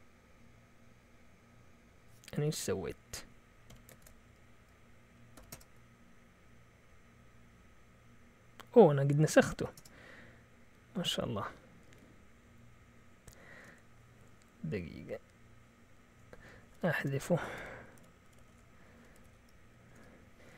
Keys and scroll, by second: 3.7 Escape, 4.0 typing, 5.3 typing, 5.5 Return, 9.3-10.2 typing, 16.5-19.7 typing, 19.8 Return.